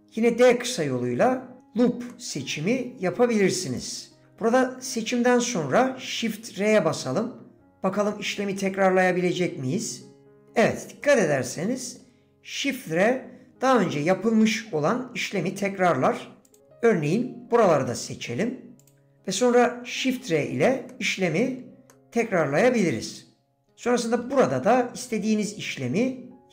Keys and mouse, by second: 2.1 click, 11.0 click, 11.0 shift+r, 14.1 click, 15.3 middle click, 17.9 middle click, 18.8 shift+click, 20.9 middle click, 20.9 shift+r, 21.9 click.